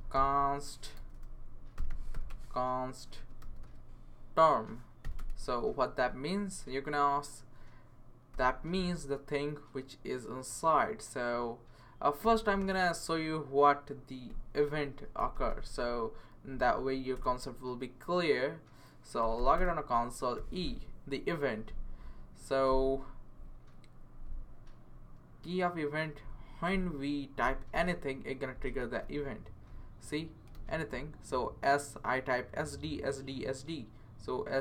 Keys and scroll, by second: 0.0-5.5 typing, 8.3 =, 15.3 super+/, 17.1 Return, 19.0-20.9 typing, 28.5-30.5 typing.